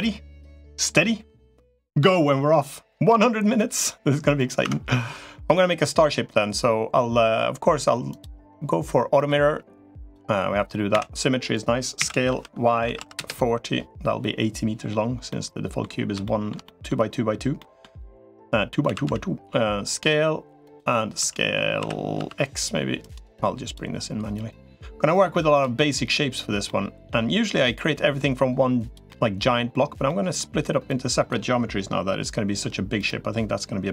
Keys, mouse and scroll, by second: 4.5 Tab, 7.9 click, 9.1 click, 10.7 a, 11.9 s, 15.1 middle click, 16.0 shift+middle click, 16.4 middle click, 17.4 middle click, 18.7 s, 21.1 s, 24.1-25.5 drag, 25.6 middle click, 26.4 middle click, 27.5-28.7 drag, 28.9 middle click, 29.9 middle click, 30.7 click, 33.7 click.